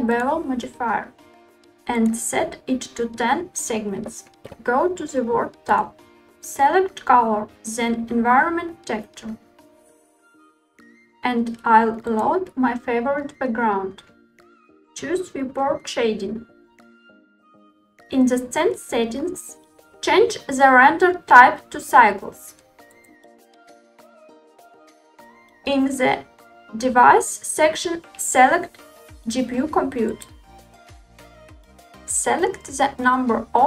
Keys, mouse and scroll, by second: 0.4 click, 2.5-3.6 drag, 5.6 click, 9.0 click, 16.6 click, 18.9 click, 21.3-24.9 drag, 26.9-30.4 drag, 33.1-33.6 drag.